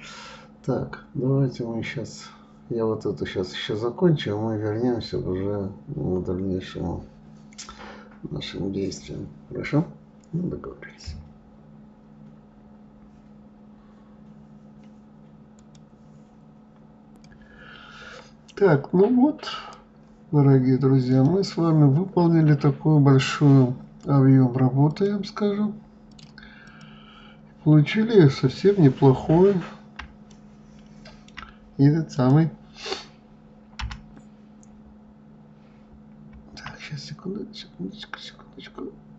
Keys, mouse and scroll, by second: 0.0-1.3 drag, 1.3-4.0 scroll down 3, 4.0-4.8 scroll down 1, 19.9 click, 21.5 click, 25.3 click, 26.5-28.0 drag, 28.0-28.6 scroll down 2, 28.6-29.7 scroll up 6, 29.7-30.6 scroll down 2, 30.7-32.6 shift+middle drag, 32.6 click, 34.2 g.